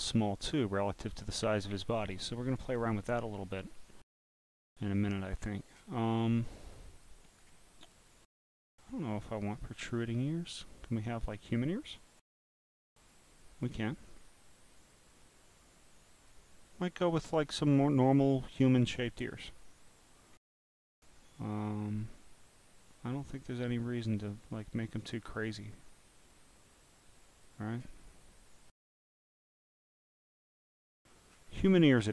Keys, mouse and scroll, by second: 0.0 click, 5.3 click, 6.1-6.8 scroll up 13, 7.0 click, 9.5-10.0 scroll up 6, 10.0 scroll, 10.5 scroll, 12.4 click, 13.1 click, 14.1 scroll down 5, 14.9-16.3 drag, 21.5 scroll down 1, 24.2 click, 24.9 click, 29.5-30.0 scroll down 2, 30.0-30.9 scroll down 3, 31.3-31.7 scroll up 8, 31.7-32.1 scroll down 19.